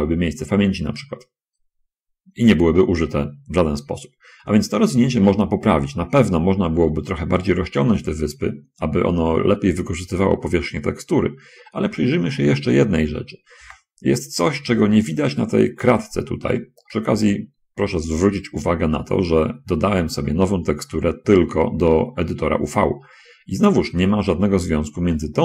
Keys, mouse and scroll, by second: 1.4 middle click, 2.7 scroll down 2, 14.0 shift+space, 16.4 middle click, 17.2-20.0 middle drag, 20.2 middle click, 22.2 middle click.